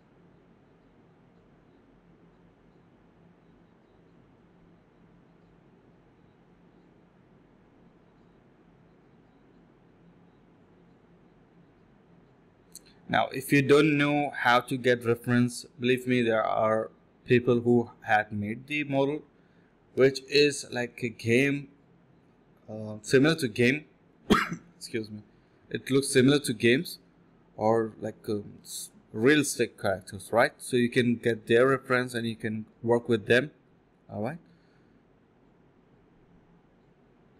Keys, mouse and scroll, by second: 0.0-0.1 typing, 2.1-2.8 typing, 4.1 typing, 4.5 alt+click, 4.7 alt+click, 5.2 alt+click, 5.7 alt+click, 8.2 scroll down 1, 8.4 middle click, 8.6 scroll up 1, 8.7-9.1 scroll down 2, 8.9 middle click, 9.1 middle click, 9.3 scroll up 1, 9.4 middle click, 9.8 scroll down 1, 9.9 middle click, 10.5 scroll down 1, 10.7 middle click, 10.9-11.9 scroll up 1, 12.8 alt+click, 13.0 alt+click, 13.3-13.9 scroll up 2, 13.6 middle click, 13.9 middle click, 14.8 alt+click, 14.9 alt+click, 15.6 ctrl+b, 16.1-17.8 typing, 19.9 typing, 21.1-21.5 typing, 22.0 shift+click, 22.5 shift+click, 22.7 alt+click, 23.1 alt+click, 24.1 alt+click, 24.4 alt+click, 24.6 alt+click, 25.2 typing, 26.2 shift+click, 26.3 shift+double click, 26.4 shift+click, 26.6 typing, 28.2-29.7 typing, 31.6 typing, 33.1 shift+click, 34.9 alt+click, 36.0 alt+click, 36.9 alt+click.